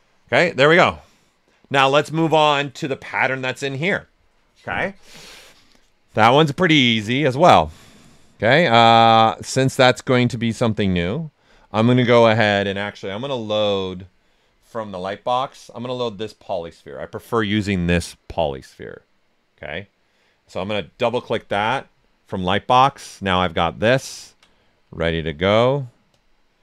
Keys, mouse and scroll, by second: 6.6 right click, 6.6 typing, 8.4-9.7 drag, 9.7-13.4 drag, 14.7 click, 20.4 click.